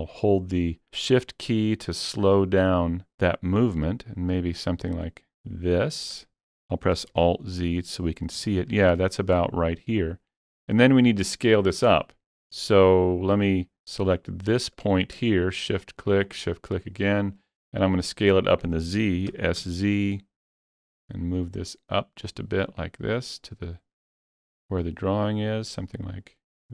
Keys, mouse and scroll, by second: 7.0 alt+z, 7.6-8.1 scroll up 2, 8.1 scroll up 1, 8.5 shift+middle click, 14.1 shift+middle click, 14.1 scroll up 1, 15.4 shift+click, 16.3 shift+click, 19.3 s, 19.6 z.